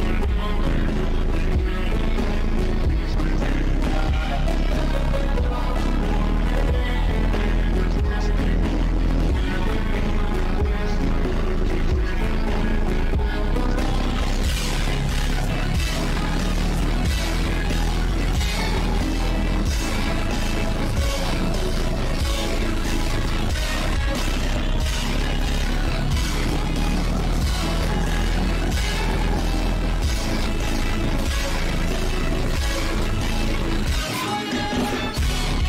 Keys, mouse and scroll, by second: 2.6 click, 2.8 shift+`, 4.0 click, 4.4 click, 5.6 click, 6.1 click, 6.3 click, 6.7 click, 6.9 click, 7.2 click, 7.5 click, 8.1 click, 9.1 click, 9.7 click, 10.3 ctrl+z, 10.4 shift+`, 11.6 click, 12.1 ctrl+z, 12.7 click, 13.8 shift+`, 15.7 shift+`, 17.0 click, 17.4 click, 18.9 click, 19.4 click, 19.8 shift+`, 21.4 shift+`, 22.1 click, 22.4 click, 22.8 click, 23.4 shift+`, 23.9 click, 24.4 click, 25.5 shift+`, 26.2 click, 26.9 click, 27.7 shift+`, 28.5 click, 29.1 click, 30.5 click, 31.1 click, 32.0 shift+`, 33.1 click, 34.1 click.